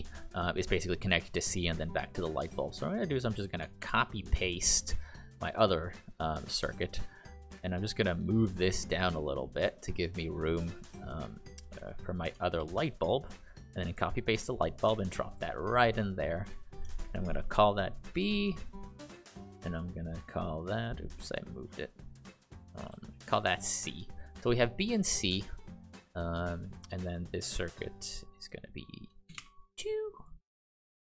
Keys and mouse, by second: 2.5 click, 3.8 ctrl+c, 3.9 ctrl+v, 5.9 click, 6.4 click, 11.1 click, 12.5 ctrl+c, 12.7 ctrl+v, 14.8 click, 17.3 shift+b, 18.0 Return, 20.1 click, 22.9 shift+c, 23.3 click, 29.2 shift+BackSpace, 29.3 shift+BackSpace, 30.1 click.